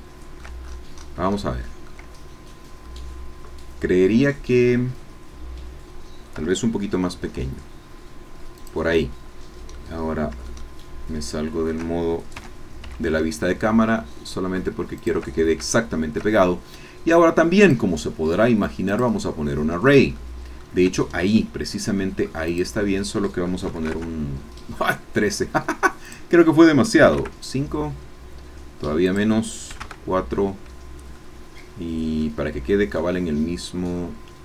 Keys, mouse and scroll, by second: 0.6-1.2 shift+scroll up 4, 1.4 shift+middle click, 2.8 scroll down 2, 7.1 s, 8.6 click, 9.8-11.9 drag, 12.4 g, 12.8 z, 15.0 shift+click, 15.4 shift+scroll down 2, 15.7 shift+click, 16.3 shift+middle click, 17.6 click, 18.9 click, 20.2 shift+middle click, 21.1-22.4 shift+scroll down 3, 22.4-23.6 drag, 23.6 KP_1, 23.7 KP_3, 23.9 KP_Enter, 26.0 click, 27.0 KP_5, 27.3 KP_Enter, 29.0 click, 29.7 KP_4, 29.8 KP_Enter, 31.2-32.3 shift+middle drag, 32.4-34.4 shift+middle drag.